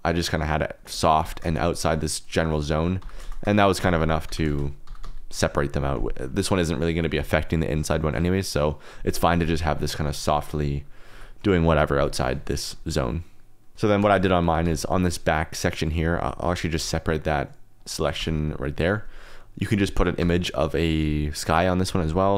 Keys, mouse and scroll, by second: 0.0 click, 1.2 g, 1.5 shift+z, 2.6 shift+click, 2.9-5.0 typing, 3.5 shift+click, 4.1 click, 4.6 click, 5.3-7.3 drag, 10.0-11.4 drag, 12.9 shift+click, 13.7 KP_0, 14.4 Tab, 14.6 3, 14.7 click, 16.4 p, 18.2 Tab, 18.4 click, 19.8 click, 20.8 click, 21.4 middle click.